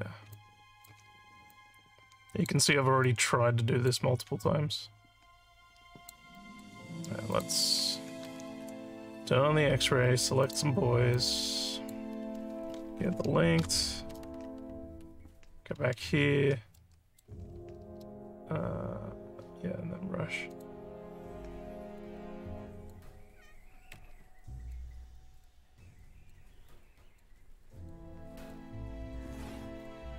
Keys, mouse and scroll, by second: 0.3 alt+click, 1.5 click, 3.0 click, 4.4-6.1 alt+drag, 6.3 alt+middle click, 7.3 click, 10.4 click, 11.1 click, 16.1 alt+scroll up 2, 16.8 alt+middle click, 20.5 click, 21.9 click, 23.5 click, 24.4 click, 25.2 click, 26.0 click, 26.8 click, 27.7 click, 28.3 click, 29.6 click.